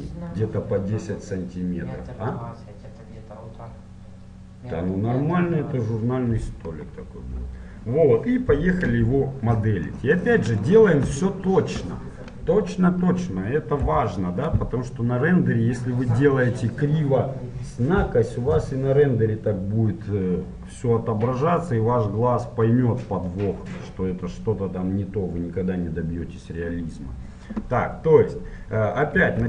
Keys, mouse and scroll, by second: 10.0-14.2 middle drag, 14.2 n.